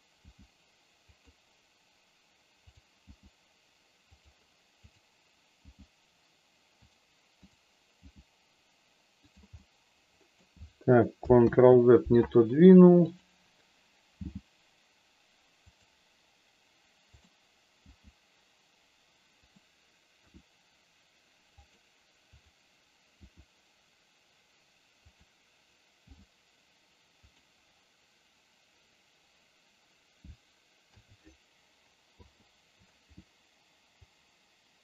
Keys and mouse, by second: 1.1 click, 2.6 click, 3.0 g, 5.6 g, 7.4 click, 9.2 click, 9.2 g, 9.6 middle click, 11.5 ctrl+z, 13.0 click, 14.2 g, 15.6 click, 17.0 click, 17.8 g, 19.4 click, 20.2 r, 22.4 click, 23.2 r, 25.0 click, 26.0 g, 30.9 a, 32.1 i, 34.1-34.8 drag.